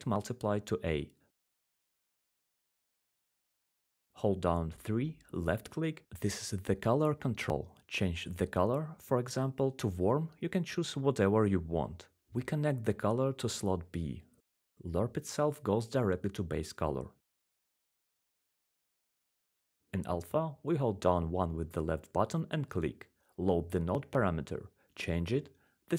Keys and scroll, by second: 0.0-1.0 typing, 4.3-5.0 3, 21.3-21.8 typing, 25.6-25.9 typing.